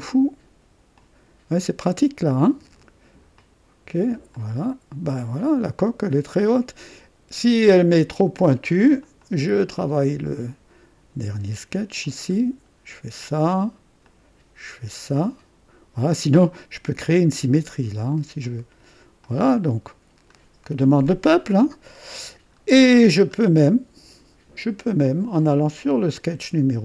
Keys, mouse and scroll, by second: 0.9-2.6 drag, 0.9 typing, 3.3 click, 4.3-7.9 drag, 9.0 click, 10.0 right click, 12.0 click, 14.0-16.1 drag, 18.4 click, 19.2-22.4 drag, 22.5-22.9 scroll up 1, 23.0-23.4 scroll down 1, 23.7 right click, 24.1 typing, 25.3 click, 26.5 scroll up 1.